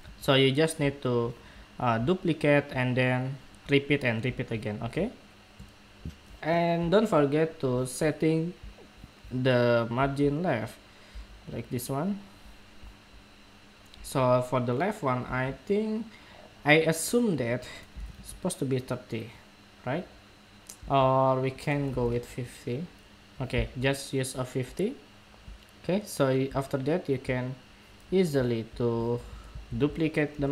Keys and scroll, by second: 29.2 super+c.